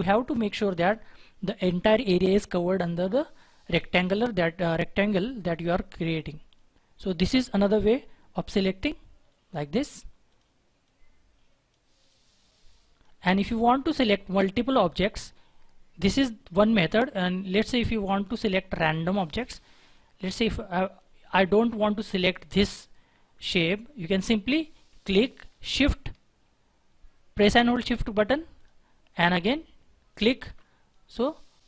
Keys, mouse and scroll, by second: 18.2 right click, 28.5 shift+click, 30.1 shift+click.